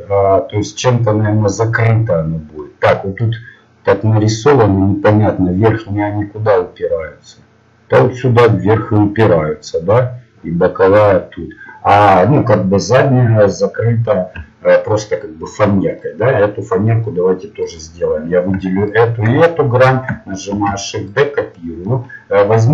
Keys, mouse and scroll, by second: 13.8 middle click, 17.8-19.5 right drag, 20.5 shift+d.